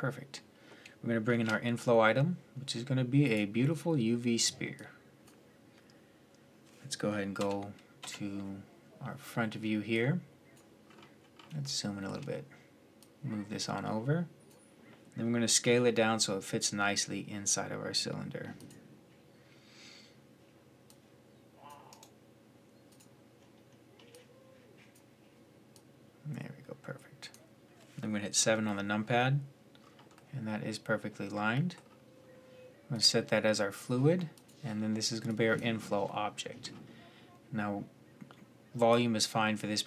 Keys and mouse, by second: 1.0 shift+a, 7.2 KP_3, 7.8 KP_1, 10.7 click, 11.3 click, 11.5 middle drag, 11.7 click, 11.7 middle click, 11.9 click, 12.8-14.4 drag, 14.4-15.4 right drag, 15.4 s, 20.7-24.5 right drag, 24.7-28.1 drag, 28.1 KP_7, 35.8 middle drag, 36.0 click.